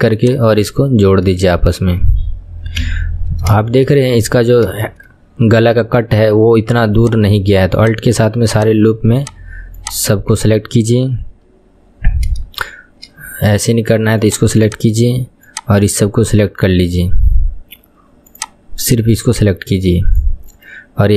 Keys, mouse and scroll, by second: 0.3 click, 1.0-1.6 scroll down 1, 1.6-2.9 shift+middle drag, 2.9 KP_1, 3.2-3.6 scroll up 3, 3.6-4.9 scroll down 1, 4.9-7.3 scroll down 5, 7.3 alt+click, 7.9 alt+click, 8.7 alt+click, 9.3 alt+click, 10.0 alt+click, 12.1-13.8 scroll up 3, 13.8-14.4 scroll up 1, 14.4 click, 16.7 click, 18.5 click, 20.3 click.